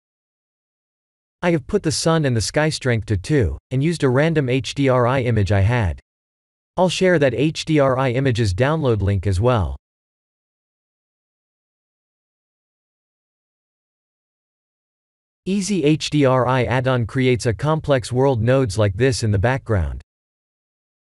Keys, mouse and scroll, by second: 0.0 click, 1.4 click, 12.7 n, 14.8 click, 14.8 n, 15.9 click, 18.8 shift+middle click, 20.2-21.0 scroll up 7.